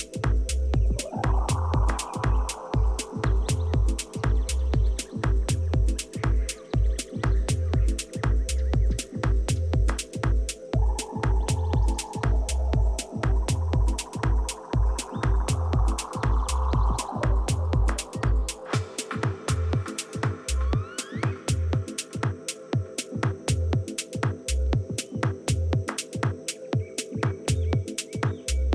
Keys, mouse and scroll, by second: 2.3-4.2 drag, 3.9 a, 4.7-8.2 right drag, 8.7-11.0 drag, 15.5 middle click, 16.6 a, 19.0-22.4 right drag, 22.3-24.2 drag, 28.2-28.7 middle drag.